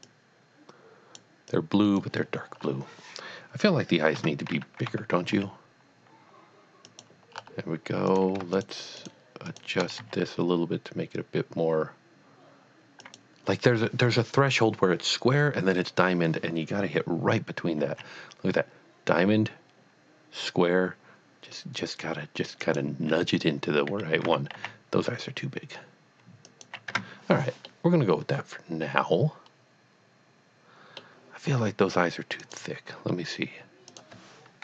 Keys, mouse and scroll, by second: 0.2 click, 1.5 click, 2.6 scroll up 1, 4.3 Tab, 4.9 a, 5.3 s, 6.9 click, 7.4 scroll up 1, 8.1 click, 8.6 shift+click, 9.0 shift+double click, 9.5 shift+click, 10.0 s, 13.0 click, 17.8 click, 18.0 s, 22.6 s, 22.6 click, 24.3-24.6 typing, 26.5 click, 26.9 Tab, 27.7 middle click, 28.0 middle click, 30.1 middle click, 32.4 click, 34.1 click.